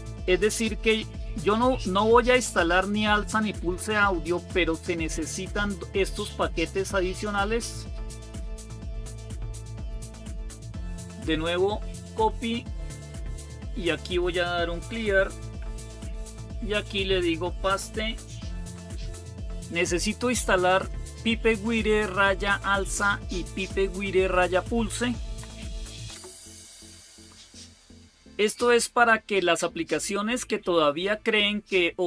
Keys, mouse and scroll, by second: 7.1-9.7 drag, 10.7 right click, 12.7 click, 13.8 click, 14.6-15.9 typing, 17.3 click, 18.5 ctrl+v, 20.1 typing, 25.2 Right, 26.0 Return, 28.0 Right, 28.4 Return.